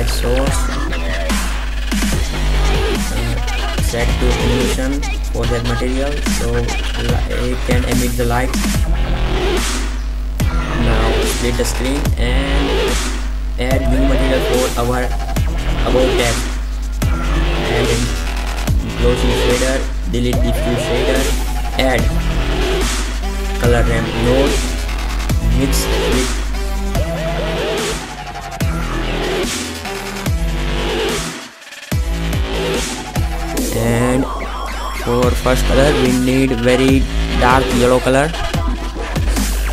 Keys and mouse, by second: 0.3-0.8 drag, 0.8 r, 1.3 KP_0, 2.9 shift+z, 4.4 shift+z, 5.9 click, 6.1 click, 9.3-11.0 drag, 16.0 shift+a, 19.4-19.9 drag, 19.9 Delete, 21.0 shift+a, 25.9-27.3 drag, 29.1-30.1 drag, 30.7-33.3 drag.